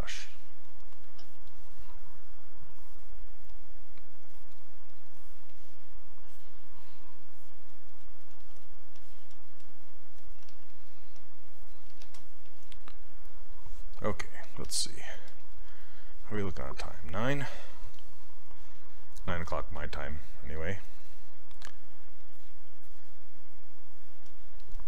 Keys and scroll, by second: 10.5 s.